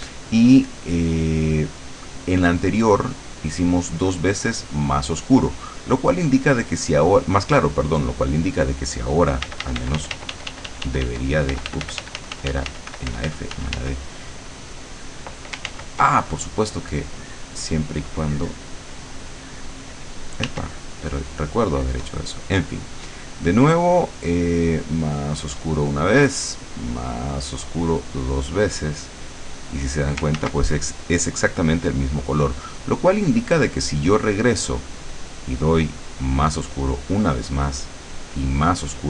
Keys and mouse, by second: 0.2 click, 3.6 click, 5.0 click, 8.2 click, 9.6 d, 11.6 f, 14.6 click, 15.8 ctrl+z, 20.6 w, 22.9 click, 25.3 click, 26.4 click, 28.0 click, 29.0-30.1 drag, 30.4 ctrl+z, 33.4 click, 36.4 click, 37.6 click.